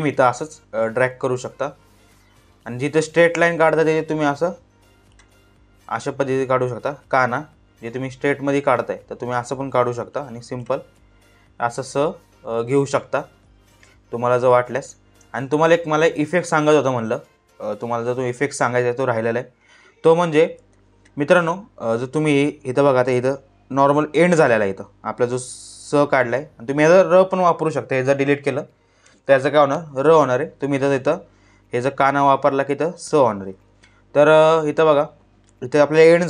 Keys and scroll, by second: 14.3 space, 28.6 Delete.